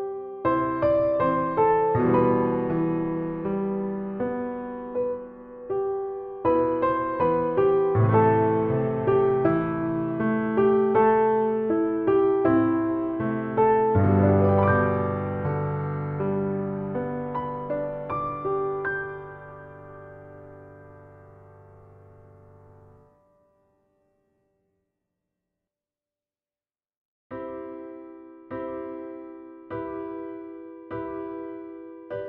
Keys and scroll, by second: 0.0 shift+a, 0.5 shift+f, 2.7 shift+f, 4.3 shift+f, 4.4 a, 5.3 shift+f, 8.7 a, 9.3 shift+f, 11.0 shift+f, 11.7 shift+f, 12.3 a, 19.7 Tab, 25.5 Tab, 26.0 shift+Tab, 26.8 shift+7, 28.6 shift+Tab, 29.4 shift+Tab, 30.9 ctrl+shift+j, 31.1 ctrl+shift+Return, 31.2 shift+Tab.